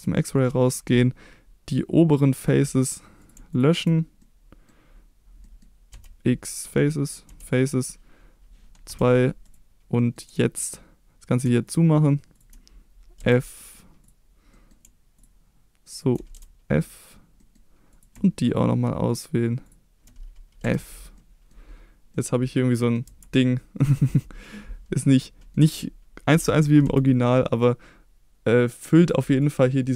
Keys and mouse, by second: 0.4 middle click, 2.1 click, 2.4 click, 3.5 shift+click, 4.2 middle click, 5.5 middle click, 5.9 x, 7.3 x, 8.9 2, 9.5 click, 10.0 middle click, 10.6 middle click, 11.3 click, 11.7 shift+click, 12.4 shift+click, 13.2 f, 13.6 middle click, 14.5 middle click, 15.9 click, 16.3 f, 16.9 middle drag, 16.9 d, 17.4 middle click, 18.0 click, 20.6 f, 21.2-21.5 middle drag, 22.1 middle click, 23.1 Tab, 23.8-24.4 middle drag, 25.0 middle click, 26.3 g, 26.9 x, 29.0 click, 29.4 click, 29.7-29.9 middle drag.